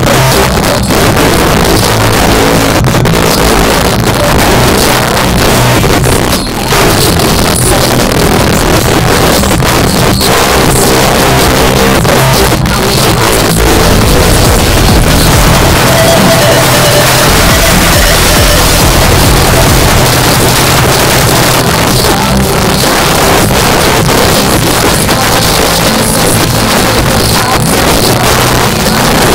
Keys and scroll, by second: 20.0 Page_Down.